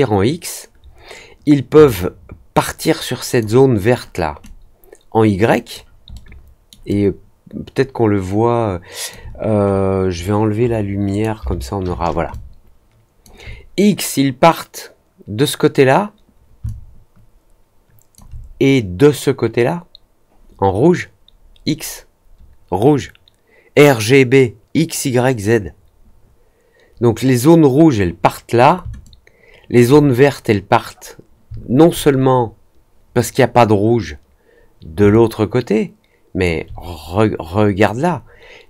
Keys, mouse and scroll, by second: 1.9-3.3 alt+drag, 4.4-5.7 alt+drag, 6.1 alt+middle click, 6.8-9.0 alt+drag, 9.6 middle click, 11.0 click, 12.2 alt+click, 16.6-18.1 alt+drag, 29.0 alt+click, 35.0-36.4 alt+drag.